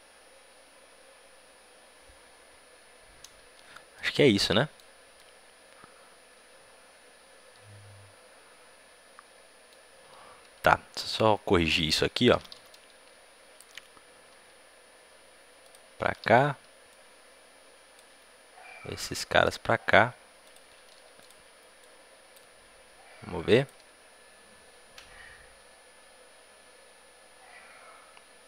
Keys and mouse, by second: 3.9 middle click, 4.6 middle click, 4.7-6.9 middle drag, 11.7-14.2 drag, 14.2 a, 14.2 b, 14.2 g, 18.7 a, 21.1-25.3 drag.